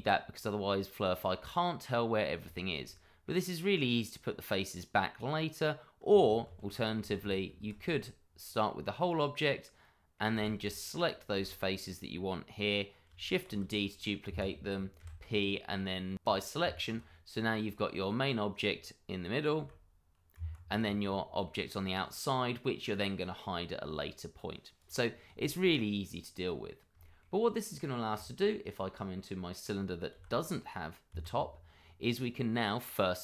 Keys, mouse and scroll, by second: 2.5 shift+middle click, 4.9-5.2 scroll down 1, 5.2 middle click, 6.4 ctrl+z, 7.8 ctrl+z, 8.0-9.8 scroll up 1, 9.8 middle click, 10.4 shift+z, 10.6 click, 11.3 shift+z, 13.5 shift+d, 14.3 Escape, 15.0 p, 16.2 click, 16.6 Tab, 17.3 middle click, 17.7 click, 19.5 g, 20.4 Escape, 20.7 click, 21.1 middle click, 24.8 click, 25.1 scroll down 1, 25.3 shift+middle click, 25.7 middle click, 27.0 shift+middle click, 30.1 g, 31.1 Escape.